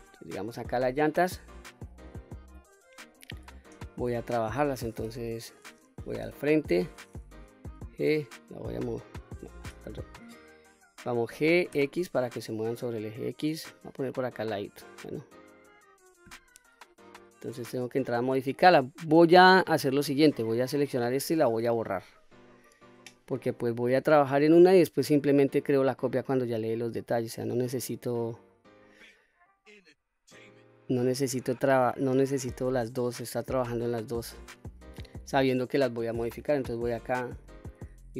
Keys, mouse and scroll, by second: 0.0-0.4 middle drag, 2.7-3.4 scroll up 2, 3.5 shift+middle click, 5.4-6.0 middle drag, 6.3 KP_1, 7.6 g, 9.4 right click, 11.1 g, 11.6 x, 13.6 click, 14.0-14.7 middle drag, 15.3-15.7 middle drag, 17.4 scroll up 2, 18.1-18.5 scroll down 2, 19.7 Tab, 21.8 Delete, 24.4 click, 28.0 click, 28.8 middle click, 30.2-33.1 drag, 33.5 middle click, 34.3-34.7 scroll up 3, 35.1 shift+middle click, 36.4 KP_1, 37.3 KP_3.